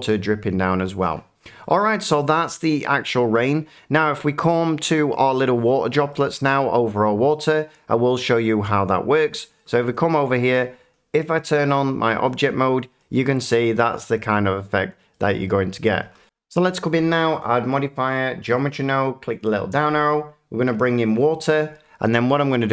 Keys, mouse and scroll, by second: 1.6 middle click, 3.4 shift+middle drag, 4.8 shift+middle click, 5.3 shift+middle drag, 6.7 middle click, 8.6 middle click, 9.9 click, 11.8 click, 13.2 middle click, 15.4 middle click, 16.2 F9, 17.4 click, 18.5 click, 19.4 click, 21.1 click.